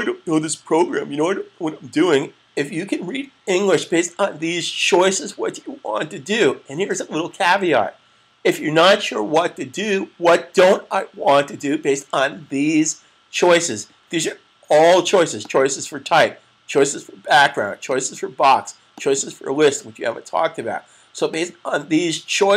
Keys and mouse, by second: 15.1 click, 21.0 click.